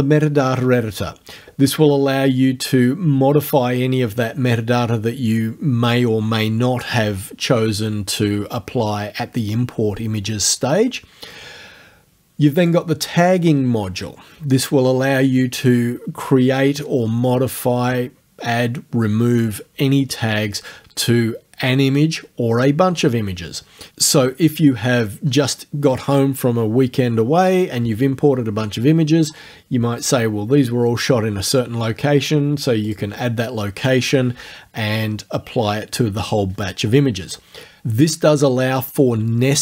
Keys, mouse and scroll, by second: 12.6 click, 32.9 click.